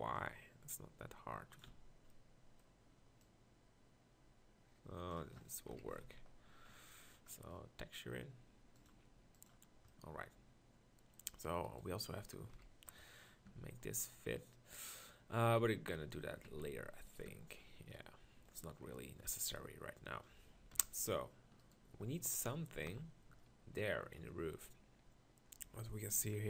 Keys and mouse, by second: 1.6 z, 5.7 KP_1, 5.9 Tab, 6.0 z, 12.5 KP_1, 13.5 Tab, 16.2 s, 17.3 Tab, 20.8 KP_1, 22.8 ctrl+KP_Decimal.